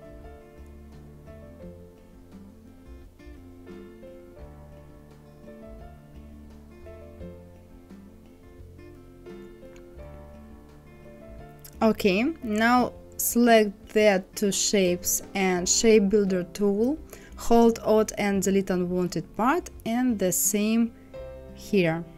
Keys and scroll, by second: 5.8 ctrl+z.